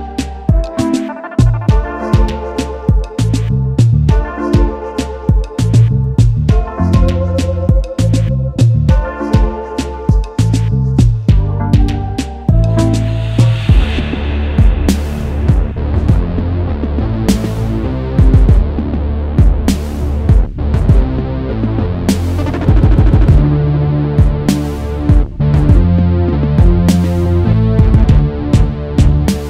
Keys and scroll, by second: 4.3 Escape, 14.6 ctrl+a, 15.1 ctrl+c, 15.3 ctrl+c, 25.5 ctrl+c, 25.7 ctrl+c.